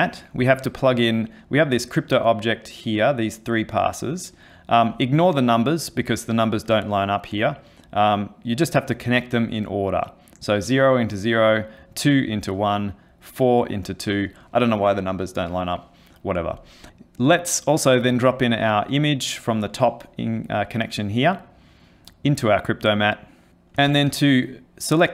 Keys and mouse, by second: 5.9 click, 8.6 click, 11.5 click, 13.1 click, 16.9 middle click, 16.9 click, 18.8 click, 22.8 click, 23.9 ctrl+space.